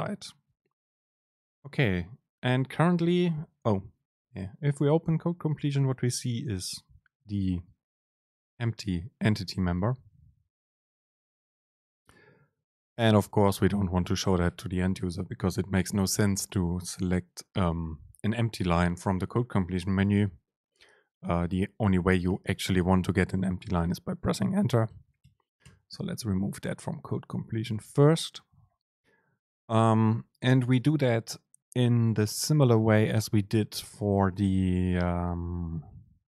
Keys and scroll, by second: 0.6 Up, 1.7 super+space, 15.1 super+space, 22.2 Return, 25.0 BackSpace.